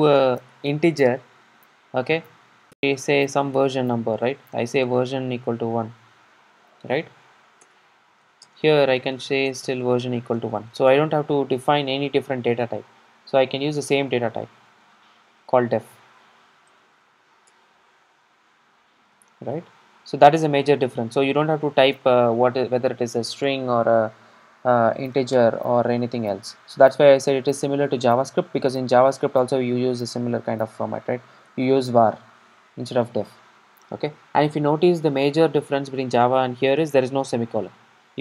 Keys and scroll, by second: 14.8 super+d, 17.6 Return, 19.2 super+d, 22.0 Return, 23.9 super+r.